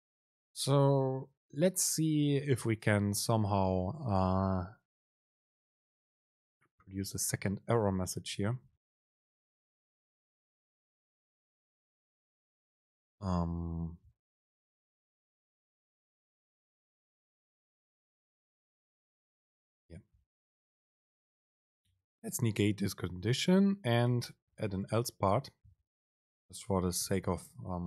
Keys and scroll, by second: 19.2 Up, 20.0 super+Right, 22.0 Down, 25.5 super+space.